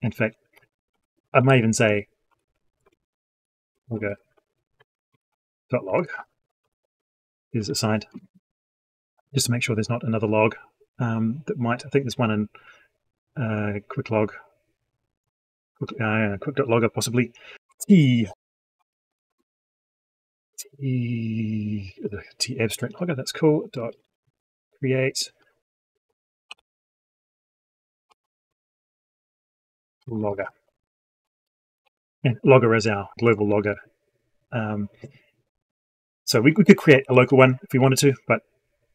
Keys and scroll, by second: 19.2 ctrl+space, 36.9 alt+Left.